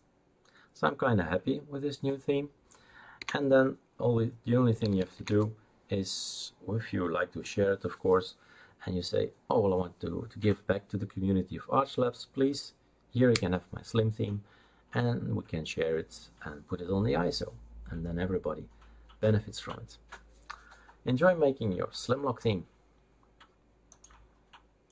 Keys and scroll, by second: 3.2 Escape, 5.3 Return, 5.3 typing.